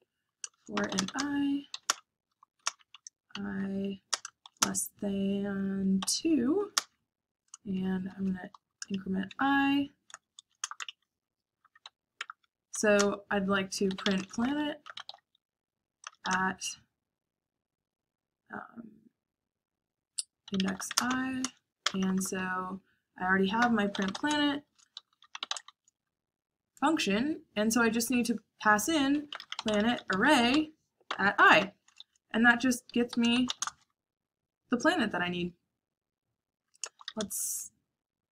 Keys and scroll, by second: 0.5-4.6 typing, 6.0-16.5 typing, 10.6 Return, 11.3 Escape, 20.1-22.1 typing, 23.5-25.6 typing, 28.8-34.0 typing, 36.5-37.5 typing.